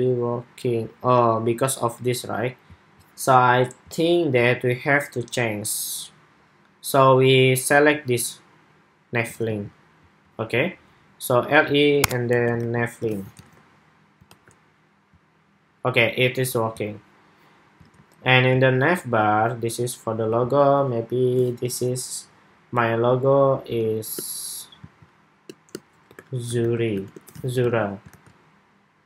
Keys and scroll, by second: 9.2 super+c, 12.3 super+v, 12.8 super+s, 13.2 super+Tab, 14.0 super+r, 17.5 super+Tab, 27.1 super+s, 27.4 super+Tab, 27.8 super+r.